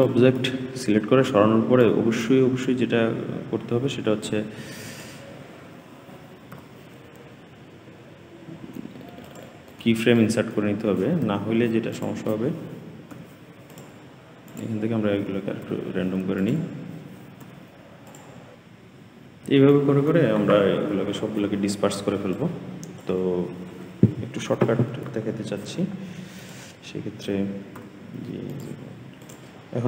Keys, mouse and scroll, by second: 13.7-17.9 typing, 15.5 click, 17.1 click, 18.5-19.0 scroll down 1, 19.0 middle click, 19.4-20.3 scroll up 9, 20.3 click, 20.9-21.6 scroll down 8, 21.6 g, 22.5-22.9 scroll down 2, 22.9 g, 23.7 i, 24.4 click, 25.0-26.2 scroll up 13, 26.2-26.6 scroll down 5, 26.6 g, 27.6-28.3 scroll down 8, 28.3 g, 28.9 i.